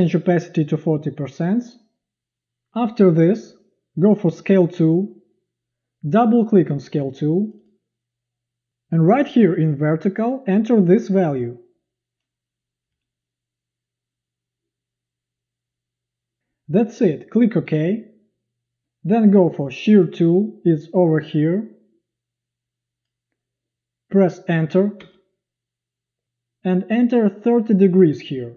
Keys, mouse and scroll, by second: 25.0 Return, 27.6-28.5 typing.